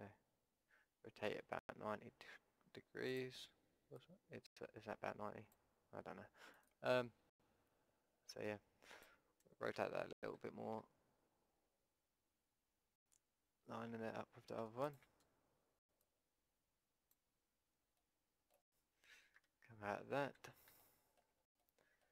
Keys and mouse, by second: 4.0-6.0 drag, 6.6-8.8 drag, 9.8 r, 16.0-17.8 drag, 17.8 middle click, 18.1 middle click, 19.4 KP_5, 20.3 z.